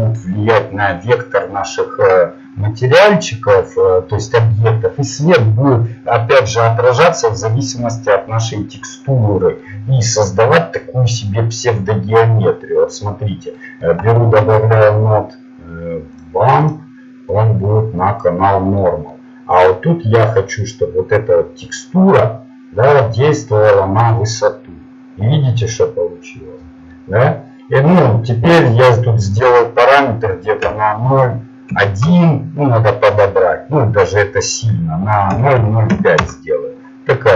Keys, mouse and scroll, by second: 17.6-20.5 drag, 17.6 shift+a, 21.4-24.5 drag, 27.0 middle click, 34.6-36.7 drag.